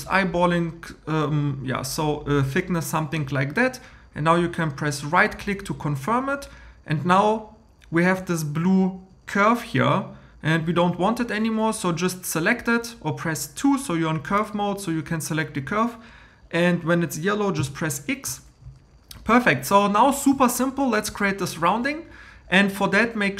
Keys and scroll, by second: 17.6 x.